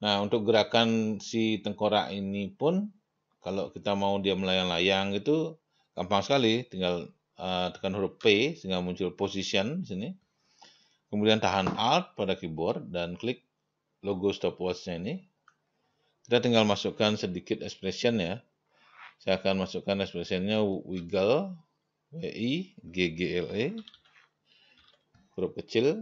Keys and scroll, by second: 8.6 p, 21.0 w, 24.2-25.8 typing.